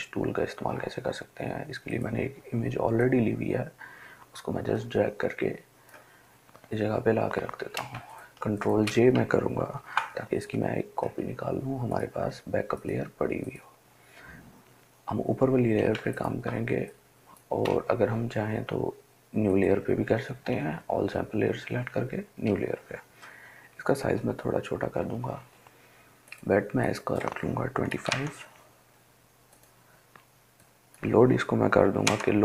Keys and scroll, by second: 9.9 ctrl+j, 16.2 ctrl+space, 16.7 ctrl+space, 23.9 [, 24.2 [, 24.5 [, 25.0 [.